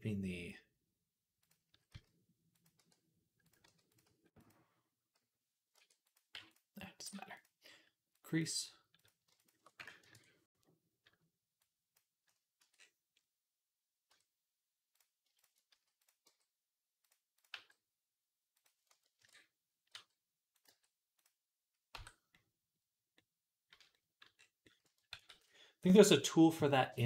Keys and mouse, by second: 1.5 s, 2.6 e, 3.5 r, 3.9 s, 5.6 e, 6.2 m, 7.0 g, 8.0 click, 8.9 shift+middle click, 9.2 alt+shift+click, 9.4-11.4 ctrl+alt+middle drag, 9.8 ctrl+KP_Add, 11.4-14.8 drag, 12.4 Tab, 13.9 Tab, 14.8-27.0 middle drag, 15.6 s, 16.1 g, 17.4 g, 19.0 ctrl+KP_Add, 19.8 r, 20.5 g, 21.8 Tab, 25.0 ctrl+s.